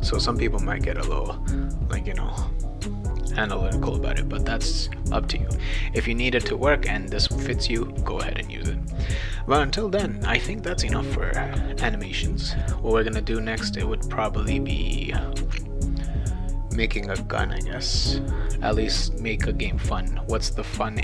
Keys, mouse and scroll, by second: 1.0 click, 2.4-4.5 right drag.